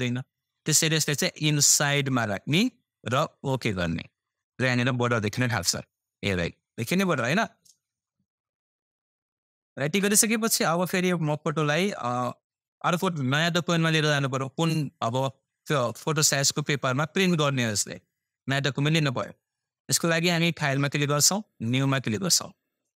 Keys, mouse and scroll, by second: 8.2-9.3 scroll up 1, 9.4 scroll down 1, 11.6-12.8 scroll up 1, 20.3 click.